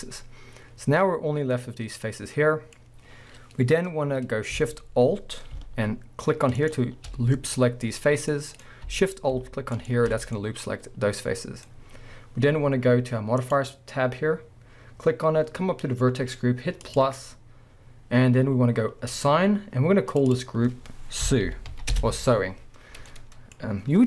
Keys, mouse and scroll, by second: 0.0-6.6 middle drag, 2.8-4.1 scroll up 2, 4.1-6.6 scroll up 1, 6.6 alt+shift+click, 8.3-9.8 middle drag, 8.7-9.8 scroll up 2, 9.8 alt+shift+click, 10.2 scroll down 2, 10.3-11.1 middle drag, 13.4 click, 16.8-20.2 drag, 20.3-23.1 drag, 22.0 Return, 23.1-24.0 middle drag.